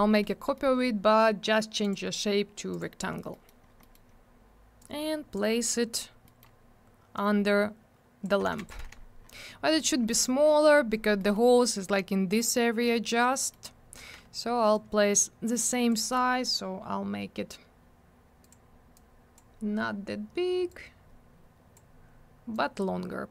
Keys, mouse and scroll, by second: 0.6 middle click, 1.8 click, 1.9 click, 2.7 click, 2.8 click, 3.3 middle click, 3.5 middle click, 3.6 scroll down 1, 3.8 middle click, 3.9 double middle click, 4.1 scroll up 1, 4.8 click, 5.5 scroll up 1, 6.3 middle click, 6.4 middle click, 7.2 click, 8.5 alt+w, 8.6 right click, 8.7 right click, 8.8 alt+w, 9.0 scroll down 1, 10.1 middle click, 10.2 middle click, 10.4 scroll up 1, 11.2 middle click, 11.3 middle click, 13.4 middle click, 13.5 middle click, 13.7 scroll up 1, 14.0 w, 14.7 click, 18.4 click, 18.5 click, 19.0 click, 20.7 click, 22.5 click.